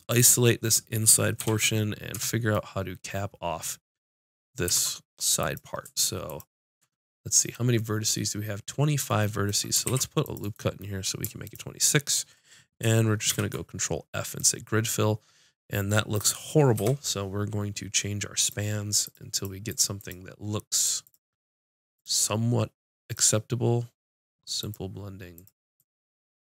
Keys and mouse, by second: 1.4 shift+h, 2.1 Tab, 4.8 ctrl+Tab, 5.9-8.1 drag, 9.9 ctrl+r, 10.5 click, 13.1 click, 13.3 ctrl+f, 16.8 F6, 19.3-23.0 drag.